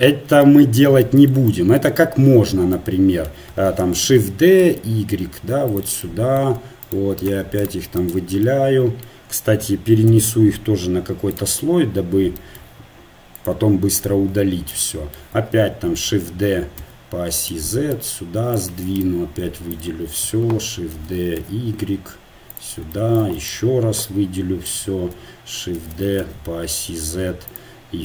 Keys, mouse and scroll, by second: 4.1 shift+d, 6.9-11.3 right drag, 11.3 m, 13.6-16.1 drag, 16.1 shift+d, 17.9-21.0 drag, 21.0 shift+d, 24.7-25.7 drag, 25.7 shift+d.